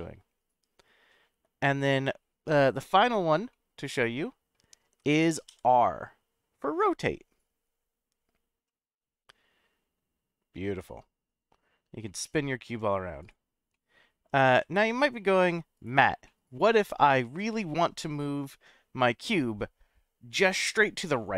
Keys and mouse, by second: 0.0-2.0 middle drag, 3.5-4.5 middle drag, 5.5 r, 13.2 right click, 13.7 middle click, 14.5 r, 15.8 right click, 16.2-20.0 middle drag.